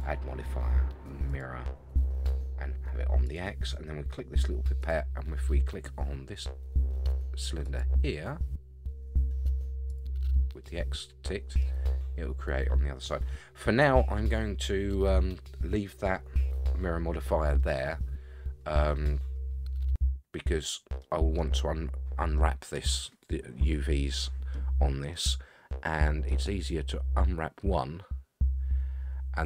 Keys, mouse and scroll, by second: 3.2 click, 4.8 click, 9.9 click, 10.6-11.6 middle drag, 13.5 scroll down 2, 13.8-15.0 middle drag, 17.6-20.7 middle drag, 21.0-21.4 middle drag, 23.9-24.5 middle drag, 25.1-26.3 middle drag, 26.3 scroll down 1.